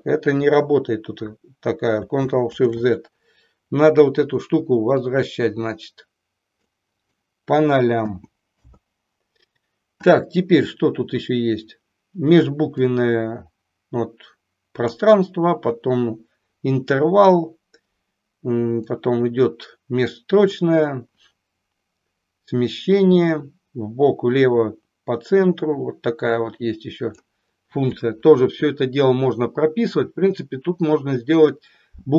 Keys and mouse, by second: 2.4 ctrl+shift+z, 5.0-6.5 drag, 7.0-9.4 drag, 12.8-14.9 drag, 18.8-20.7 drag, 22.9-27.3 drag.